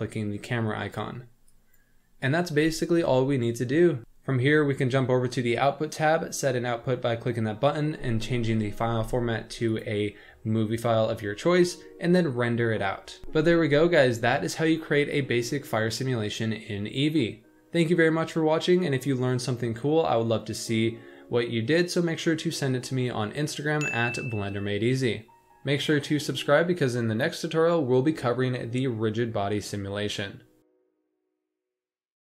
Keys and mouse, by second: 1.4 click, 2.8 shift+middle drag, 9.8-11.3 drag.